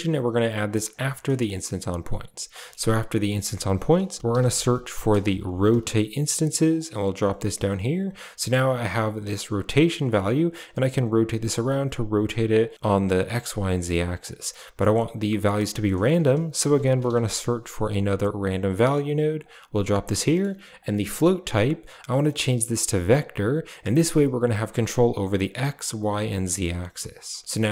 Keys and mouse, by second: 0.5 drag, 0.9 g, 2.4 middle click, 3.2 shift+a, 7.4 click, 9.5-11.0 drag, 11.3-12.5 drag, 12.8-13.8 drag, 14.7 click, 15.6 middle click, 16.0 shift+a, 20.1 middle click, 20.6-23.9 drag, 27.0 drag.